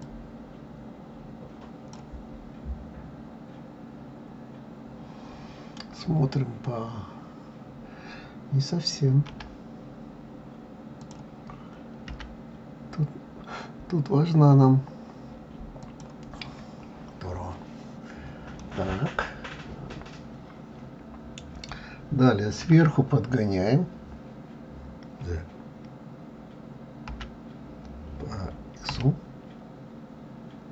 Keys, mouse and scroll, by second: 0.0 click, 2.5-3.0 scroll down 2, 5.4-5.9 scroll up 3, 6.5 scroll up 1, 9.3 r, 12.1 g, 16.4-18.2 scroll down 8, 18.2-18.6 scroll up 2, 18.6-21.7 middle drag, 22.6 KP_7.